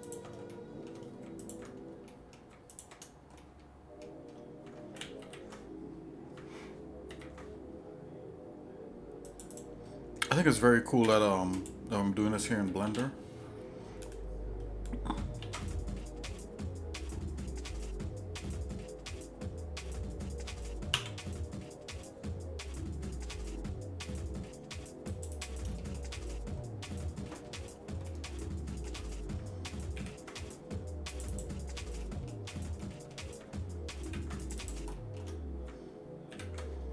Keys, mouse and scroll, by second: 0.0 alt+shift+click, 0.5 shift+middle click, 1.4 alt+shift+click, 2.1 shift+middle click, 2.7 alt+shift+click, 3.4 shift+middle click, 5.2 ctrl+g, 7.1 ctrl+b, 9.5 click, 11.1 e, 12.8 alt+m, 15.4 alt+s, 25.3 click, 25.7 middle click, 27.4 middle click, 28.1 shift+middle click, 29.9 ctrl+r, 32.0 shift+middle click, 32.8 middle click, 34.1 ctrl+r, 34.9 shift+middle click, 36.3 ctrl+r.